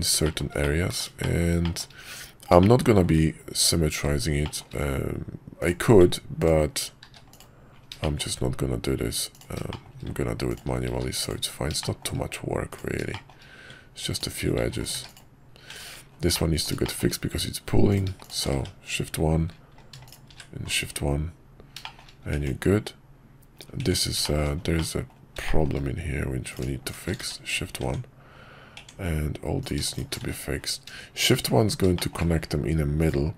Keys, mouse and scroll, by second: 0.2 shift+middle click, 0.6 middle click, 1.3 shift+middle click, 1.6 shift+middle click, 2.7 shift+middle click, 4.4 shift+middle click, 5.6 click, 7.0 q, 8.0 middle click, 9.7 shift+middle click, 10.5 ctrl+click, 10.9 q, 11.8 middle click, 12.7 click, 13.1 middle click, 14.1 ctrl+click, 14.6 q, 15.7 Tab, 16.3 middle click, 16.8 shift+middle click, 17.9 click, 18.6 shift+1, 20.0 click, 20.3 shift+1, 21.8 shift+middle click, 22.3 Tab, 24.2 shift+middle click, 24.7 middle click, 25.4 shift+middle click, 26.9 shift+click, 27.2 shift+1, 27.8 Tab, 30.3 shift+1, 32.0 middle click.